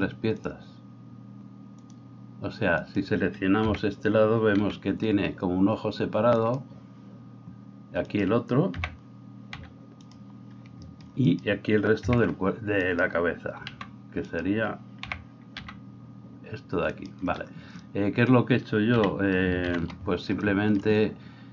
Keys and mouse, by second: 0.5-21.5 drag, 2.8 middle click, 2.8 right click, 3.7 l, 4.6 g, 8.8 l, 9.6 g, 11.2 middle click, 11.2 right click, 12.0 l, 13.7 g, 15.1 l, 15.6 g, 18.9 KP_3, 19.7 ctrl+KP_3.